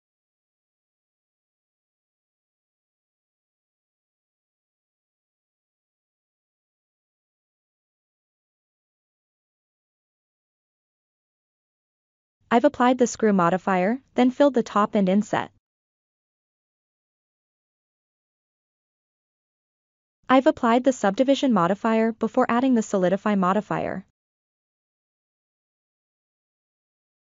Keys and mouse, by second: 0.1-0.7 middle drag, 0.8 Tab, 1.3-1.9 ctrl+middle drag, 2.8 alt+click, 4.6 f, 5.1-5.5 middle drag, 6.2 i, 8.5-9.1 middle drag, 10.3 click, 11.0-12.3 shift+middle drag, 12.9-13.2 ctrl+middle drag, 13.4-13.7 shift+middle drag, 14.2 Tab, 15.0-15.4 ctrl+middle drag, 18.0 ctrl+a, 19.8 click, 20.6 shift+middle click, 20.6 shift+click, 25.6 click, 25.8-27.2 shift+middle drag.